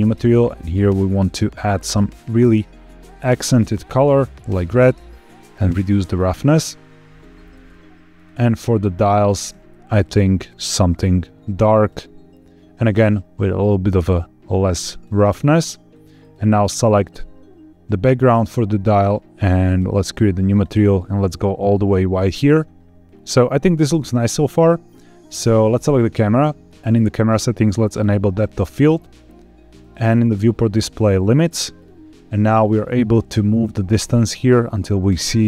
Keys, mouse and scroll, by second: 0.1 click, 5.2-7.1 drag, 8.0 click, 8.3 click, 9.3 click, 10.0 click, 13.0-15.0 drag, 15.8 click, 16.1 click, 19.7 click, 20.4 click, 23.0-24.0 scroll up 3, 24.4 click, 26.9-27.4 scroll down 1, 27.9 click, 29.7 click, 31.1 click, 31.6-32.5 scroll down 3, 32.5-33.5 scroll down 2, 33.5-35.4 drag.